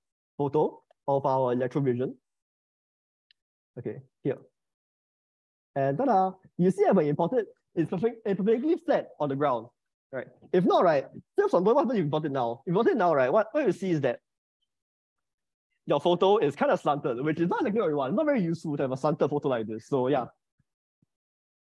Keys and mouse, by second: 6.5-8.3 middle drag, 11.9 shift+middle click, 16.3 middle click, 21.1 click.